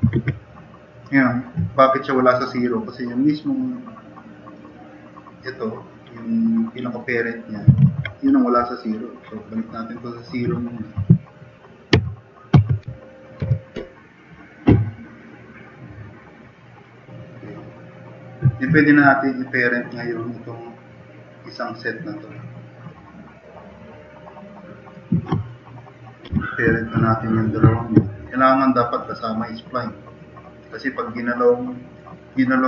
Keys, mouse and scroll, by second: 0.2 ctrl+z, 6.9-7.6 drag, 7.8 ctrl+z, 9.2 click, 9.4 click, 11.9 typing, 12.6 Tab, 13.4 Return, 15.0 typing, 15.1 click, 15.4 click, 16.1-16.5 drag, 17.6 click, 17.9 click, 26.3 Delete.